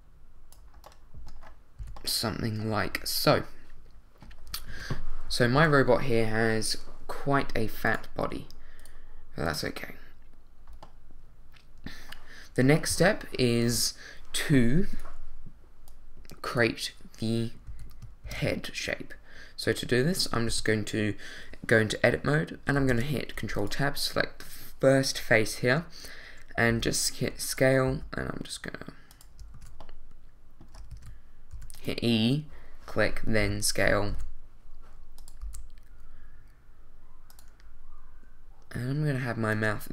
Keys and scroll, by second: 1.8 a, 4.7 |, 5.5 2, 12.9 |, 17.7 a, 20.5 Tab, 22.9 ctrl+Tab, 26.7 s, 27.9 g, 29.5 super+z, 30.9 super+z, 31.5 super+e, 32.0 e, 34.1 s, 35.4 g.